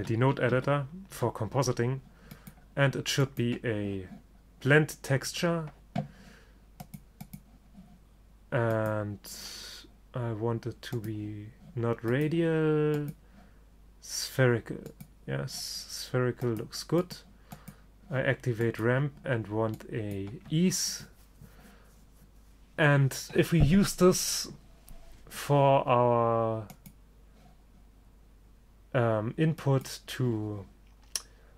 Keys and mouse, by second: 2.5-4.3 drag, 7.0-10.8 drag, 12.2-14.2 drag, 15.0-16.9 drag, 17.1-20.6 drag, 26.8-28.7 drag, 29.7-31.5 drag.